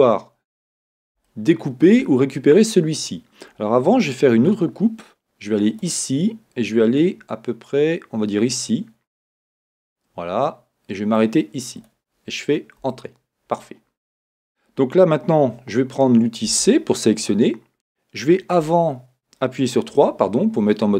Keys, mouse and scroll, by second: 0.0 shift+middle click, 0.8-20.9 middle drag, 0.8-1.2 scroll up 1, 4.4 k, 12.9 Return, 16.5 c, 18.8 Escape, 19.9 3.